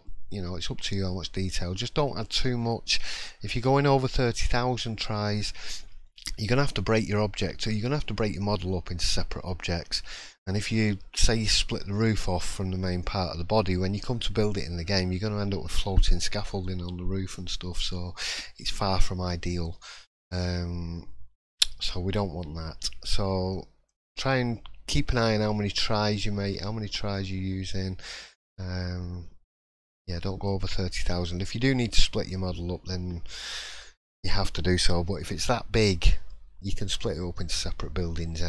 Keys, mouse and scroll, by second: 19.7 middle click, 20.5 shift+middle click, 21.6-22.6 shift+scroll up 2, 23.2 middle click, 23.2-23.9 scroll up 2, 24.0 shift+middle click, 25.4 scroll down 4, 25.7 middle click, 26.1 scroll up 2, 26.5 shift+middle click, 27.2-27.7 scroll down 2, 27.7-28.0 scroll up 1, 28.1 shift+middle click, 28.6 scroll up 1, 29.0 middle click, 29.5 scroll up 1, 29.9 shift+middle click, 30.6 scroll down 1, 31.0 middle click, 31.7-32.1 scroll down 3, 38.3 middle click.